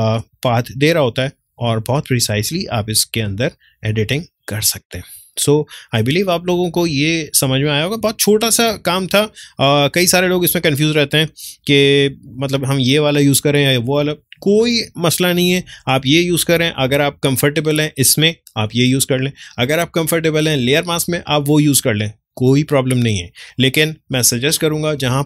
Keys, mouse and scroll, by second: 4.7 space, 5.3-13.8 ctrl+drag.